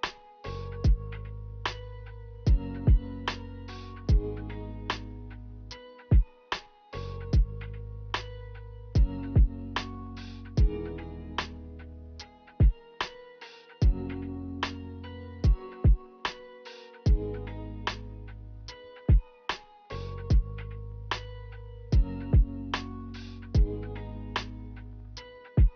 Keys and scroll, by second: 15.2-15.6 typing, 17.4-18.2 typing, 22.2 a, 24.6-25.1 typing.